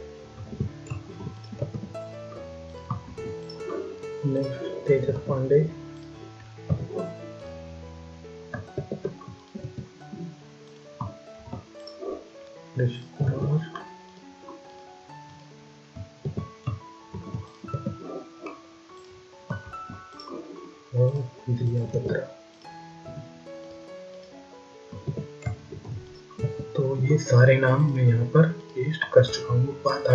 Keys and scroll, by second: 0.4 ctrl+a, 0.9 ctrl+c, 2.9 ctrl+v, 8.6 ctrl+a, 8.9 ctrl+c, 11.2 ctrl+v, 16.1 ctrl+a, 16.9 ctrl+c, 19.5 ctrl+v, 24.9 ctrl+a, 25.6 ctrl+c, 29.1 ctrl+v.